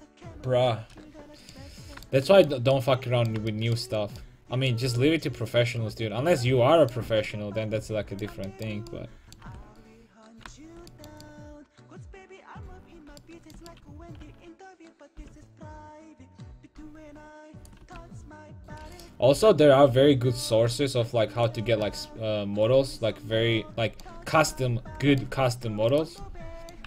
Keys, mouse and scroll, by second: 4.9 a, 5.2-7.7 middle drag, 9.5 Tab, 14.3 a, 14.7-15.8 right drag, 15.1 g, 17.8-19.0 drag, 17.9 a, 19.0 right click, 19.4 g, 21.6 click, 21.7 a, 25.9 click.